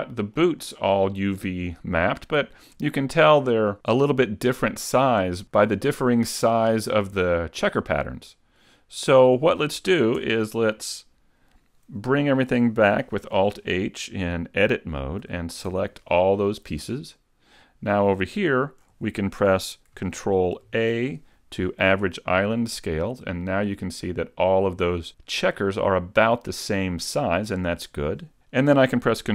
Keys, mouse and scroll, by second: 0.6 shift+middle click, 4.6 middle click, 7.8 middle click, 10.2 Tab, 13.4 alt+h, 15.2 a, 15.7 a, 20.7 ctrl+a, 20.7 shift+middle click, 20.7-23.0 scroll down 1, 23.8 middle click.